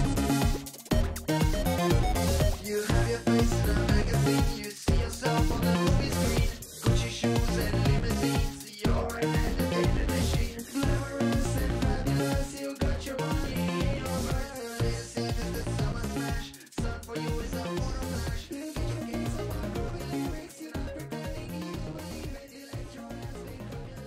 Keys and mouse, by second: 1.5 a, 7.9-9.5 drag, 12.1 a, 13.7 click, 16.1 a, 17.1 click, 22.2 middle click.